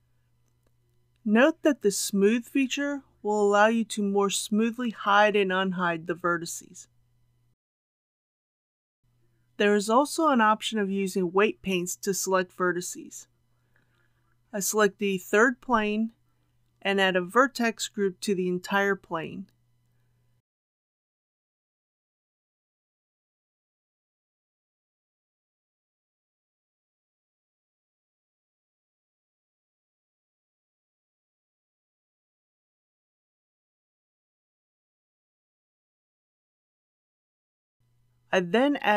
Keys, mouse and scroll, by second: 0.5-1.7 scroll down 1, 1.7-9.7 drag, 22.5 Tab, 25.2 click, 29.8-30.6 typing, 31.0 Return, 33.2 click, 37.3 Tab, 38.4 click.